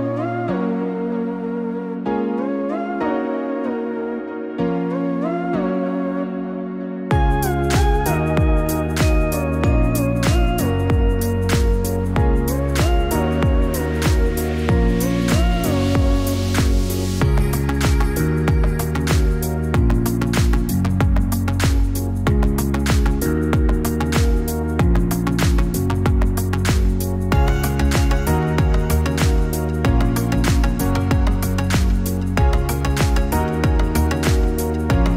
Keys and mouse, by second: 15.4 click, 23.2 click, 24.1 click, 29.9-30.8 drag, 34.0-35.1 drag.